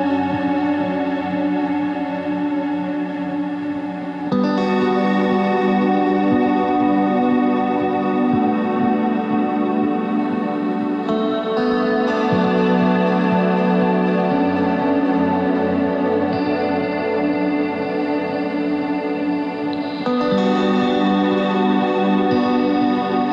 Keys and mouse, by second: 0.5 ctrl+Tab, 4.2 KP_1, 4.5 z, 4.8 c, 11.9 z, 13.4 s, 15.7 right click, 17.3-20.8 middle drag, 20.8-21.9 drag.